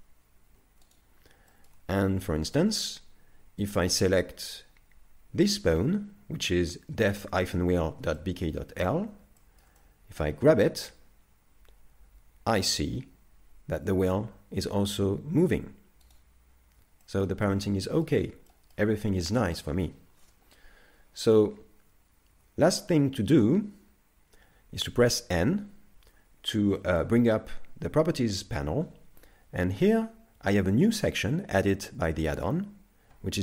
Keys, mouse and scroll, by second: 1.5 shift+middle click, 2.1 z, 2.2 middle click, 2.8-3.7 scroll up 2, 3.7 right click, 8.2 middle click, 8.9 z, 9.4 shift+middle click, 9.8 middle click, 10.7 g, 16.5-17.1 scroll down 3, 17.1 shift+middle click, 17.5 middle click, 18.5 shift+middle click, 19.4 scroll down 2, 22.3 ctrl+Tab, 25.3 n, 26.8 shift+middle click.